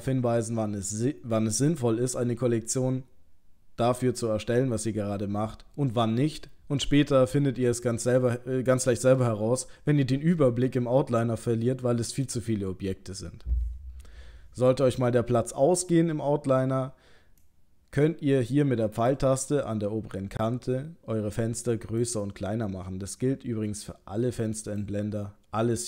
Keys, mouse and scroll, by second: 17.4 click, 23.1 click.